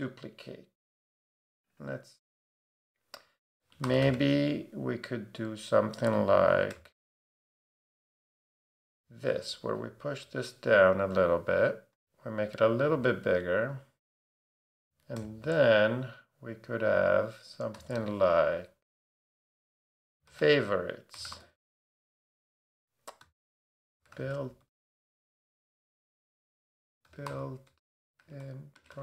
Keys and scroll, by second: 3.6-4.5 typing, 6.3-7.3 typing, 10.2 shift+Down, 13.6 shift+Down, 14.8 shift+super+Down, 15.2 shift+super+d, 19.7-21.8 typing, 23.4-29.0 typing.